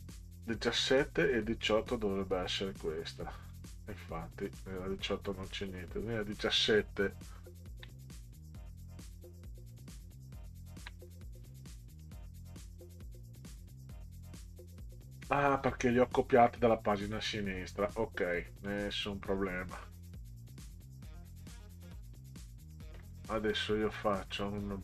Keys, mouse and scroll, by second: 1.6 click, 3.5 scroll down 4, 4.5 click, 5.6 click, 7.4 ctrl+scroll down 4, 10.4 ctrl+scroll up 2, 12.0 click, 16.2 click, 18.7 click, 23.5 click.